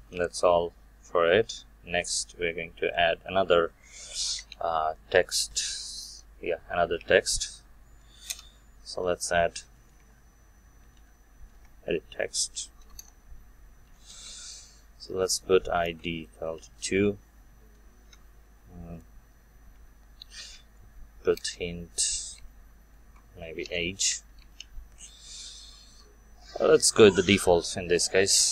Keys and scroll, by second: 4.5 ctrl+Tab, 11.5 Return.